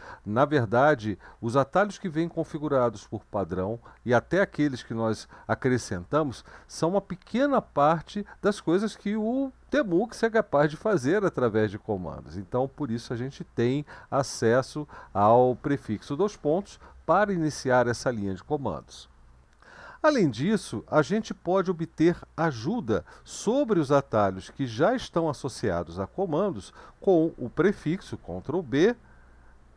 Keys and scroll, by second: 28.1 ctrl+b.